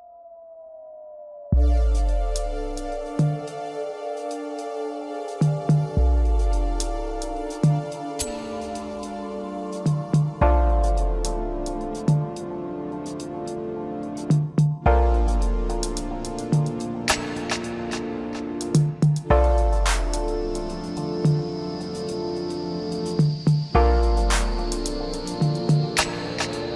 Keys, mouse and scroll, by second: 1.5 Tab, 3.2 click, 5.0 e, 10.0 scroll up 2, 10.3-10.9 scroll down 3, 10.9-13.6 middle drag, 13.6 scroll up 1, 14.2-16.1 middle drag, 16.1 KP_7, 25.9 drag.